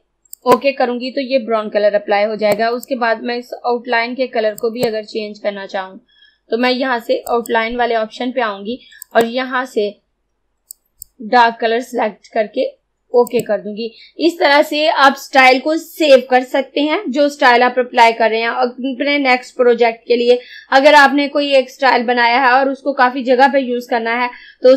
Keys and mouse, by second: 0.5-4.6 drag, 7.3 click, 13.3 click.